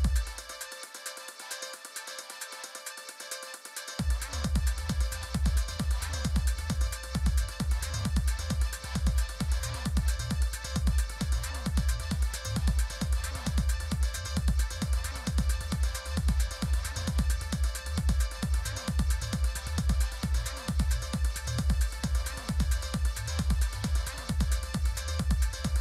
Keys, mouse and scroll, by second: 2.1-3.3 drag, 2.6-5.5 typing, 7.3 click, 9.7-11.2 drag, 10.9-12.6 typing, 14.8 click, 16.2 click, 17.9 click, 19.2 click, 20.7 click, 21.8 Delete, 22.5 3, 24.5 click.